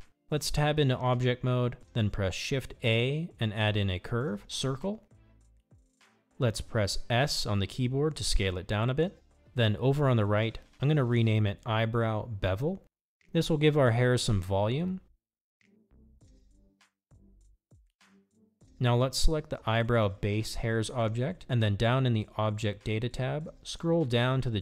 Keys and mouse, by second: 2.5 shift+a, 8.8 s, 13.3 click, 14.3-17.9 shift+drag, 16.5 e, 21.4 click.